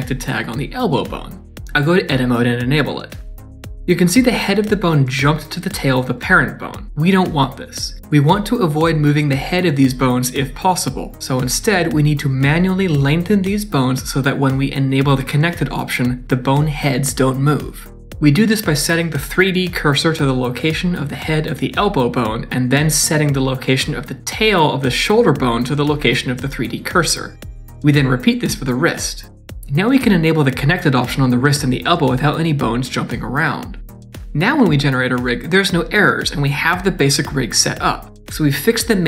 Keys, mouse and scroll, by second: 1.2 d, 1.8 Tab, 2.5 click, 18.1 shift+middle click, 18.1 scroll up 4, 18.8 click, 20.1 shift+s, 24.5 click, 25.6 shift+s, 27.8 shift+middle click, 28.9 click, 29.0 shift+s, 29.4 click, 29.5 shift+s, 29.8 scroll down 2, 30.0 middle click, 30.2 shift+middle click, 30.9 click, 31.5 click, 32.6 click, 33.3 middle click, 34.8 middle click, 35.9 click, 36.4 click, 38.3 click, 38.7 click.